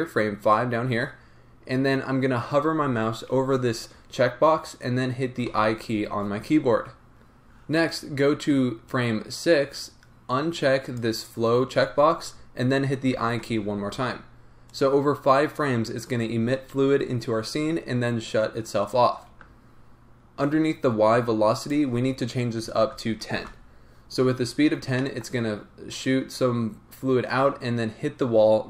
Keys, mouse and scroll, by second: 14.7-24.7 drag, 23.5 Return, 24.7 scroll down 2, 25.0-28.6 middle drag.